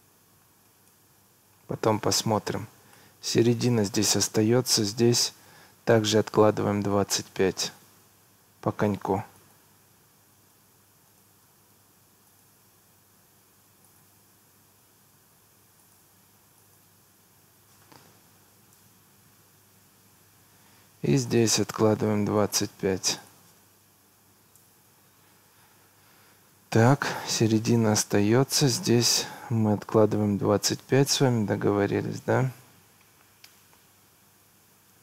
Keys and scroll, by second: 0.7 Escape, 10.2 Escape, 18.3 2, 18.8 Return, 24.1 2, 24.4 5, 24.6 Return, 25.7 Escape.